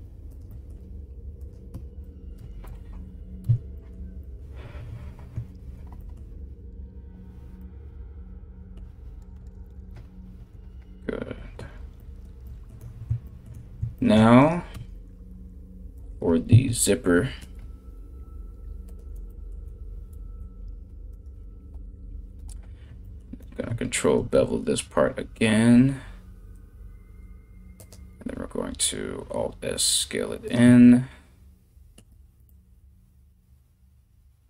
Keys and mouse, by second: 0.4 g, 1.4 Tab, 3.0 Tab, 8.9 KP_1, 14.0 right click, 14.3 Tab, 15.6 alt+right click, 17.0 ctrl+b, 20.7 alt+right click, 20.9-34.4 alt+middle drag, 23.8 ctrl+b, 27.8 alt+s.